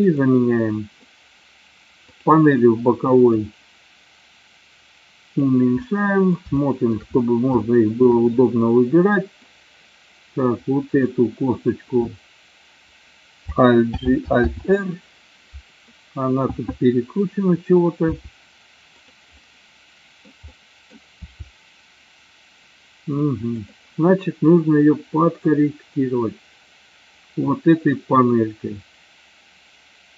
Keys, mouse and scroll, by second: 0.1 click, 3.3-5.6 drag, 6.0 middle click, 6.7-7.1 shift+middle drag, 7.8 shift+middle drag, 8.6 middle click, 13.9 alt+g, 14.6 alt+r, 18.1 r, 19.1 click, 19.3 middle click, 20.5 middle click, 21.2 r, 23.7 click, 25.5-30.1 drag.